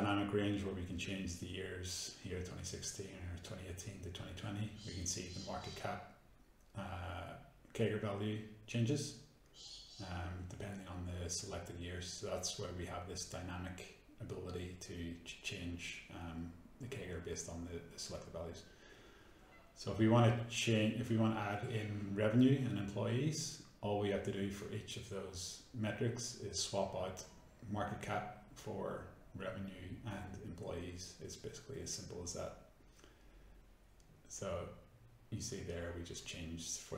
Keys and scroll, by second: 5.5 F9, 11.6 F9, 26.7 ctrl+d, 28.3 Escape.